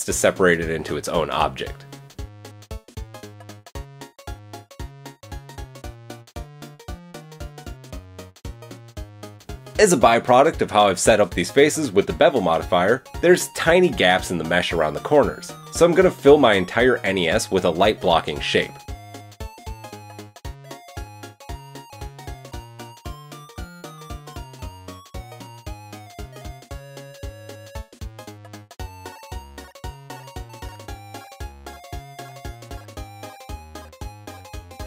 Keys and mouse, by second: 2.0 g, 3.0 click, 3.5 Tab, 4.2 ctrl+l, 4.8 g, 5.7 Tab, 7.4 KP_1, 8.8-18.9 middle drag, 9.1 KP_1, 19.3 middle click, 19.3 KP_1, 20.4 shift+a, 22.8 s, 24.3 Tab, 24.6 shift+middle click, 25.0 a, 25.2 a, 25.2 c, 25.9 g, 27.3 a, 27.4 a, 27.5 c, 28.0 g, 29.6 KP_7, 30.0 a, 31.4 g, 32.1 middle click, 32.3 s, 33.2-34.8 middle drag, 34.0 s, 34.7 g.